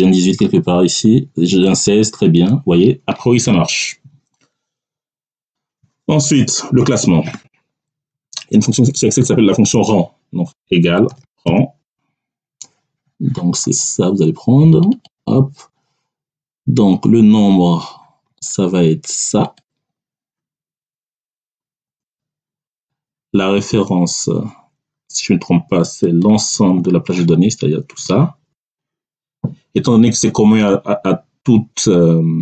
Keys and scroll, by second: 8.0 Down, 10.4-11.7 typing, 21.7 ., 27.8 ctrl+shift+Down.